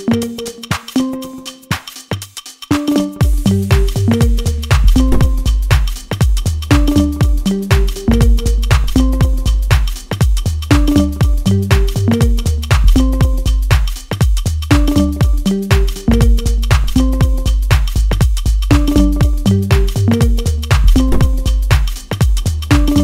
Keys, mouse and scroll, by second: 1.1 click, 1.9-4.0 middle drag, 4.0-4.4 scroll up 2, 4.4 shift+middle click, 5.2 right click, 6.3-7.0 scroll up 2, 7.0-9.8 shift+middle drag, 9.8 click, 11.1-11.5 scroll up 1, 11.5-14.0 middle drag, 14.0-15.7 drag, 16.6-17.2 scroll up 1, 17.2-22.5 middle drag.